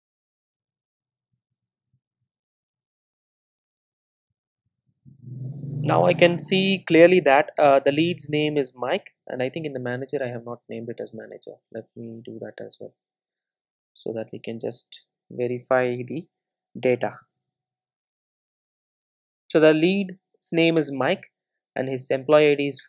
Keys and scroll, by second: 1.5 super+v, 2.1 super+s, 3.0 super+r, 14.0 super+s, 15.5 super+r.